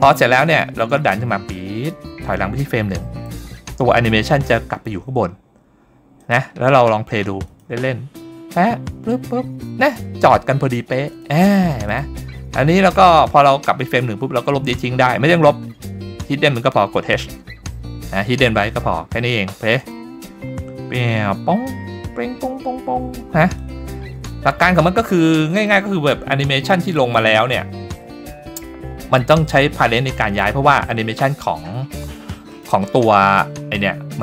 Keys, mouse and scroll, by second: 0.1 scroll down 1, 1.1-3.2 drag, 4.3 click, 6.2 click, 7.5 click, 8.0-10.5 scroll up 2, 11.1 click, 11.9 click, 14.7 click, 17.3 h, 18.6-19.5 scroll down 2, 19.8 click, 23.6 click, 24.0-25.0 scroll up 3, 25.2-25.6 shift+middle drag, 32.5 click.